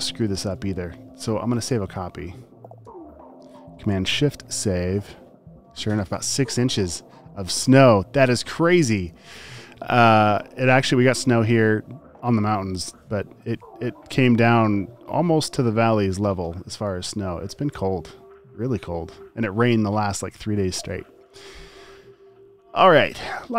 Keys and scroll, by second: 1.5 space, 3.5 shift+super+s.